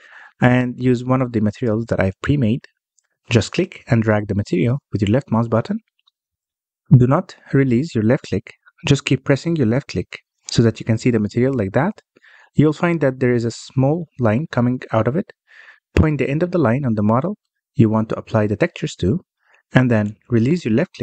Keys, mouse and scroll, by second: 1.6 BackSpace.